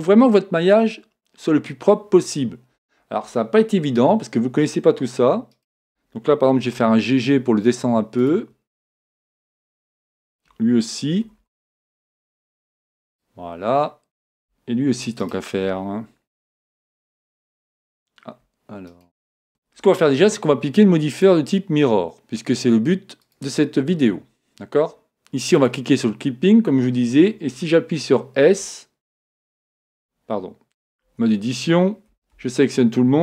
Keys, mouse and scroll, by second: 5.5-7.4 right drag, 6.6 g, 8.3-10.0 drag, 10.0-11.6 right drag, 11.3 g, 16.8 right click, 18.9 right click, 19.7 Tab, 21.2-23.0 drag, 25.6-27.3 drag, 26.6-28.5 middle drag, 28.5 s, 31.1 Tab, 32.2 a, 32.4 a.